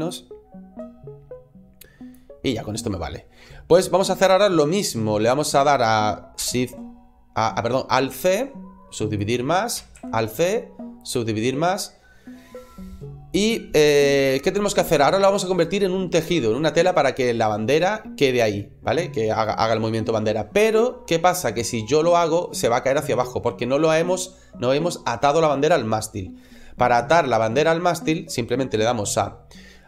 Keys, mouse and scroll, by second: 1.8 click, 8.0 alt+c, 9.8 alt+c.